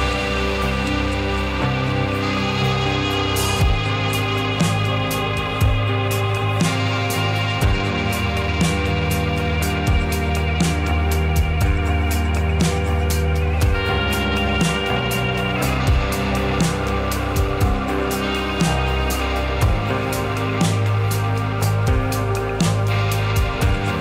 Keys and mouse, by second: 1.5 click, 1.8-3.3 middle drag, 6.8 g, 8.5 click, 9.3 middle click, 9.6 Tab, 10.2 click, 11.4-12.2 middle drag, 13.3-13.7 middle drag, 14.2 shift+middle click, 15.8 middle click.